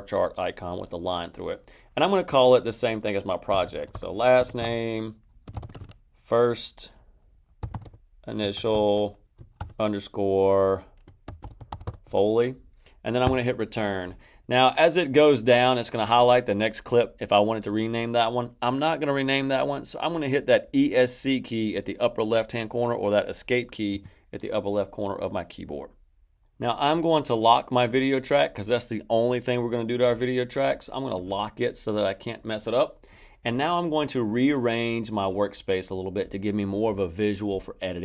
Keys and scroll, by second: 3.2-9.5 typing, 11.0-12.3 typing, 13.2 Return, 23.9 Escape.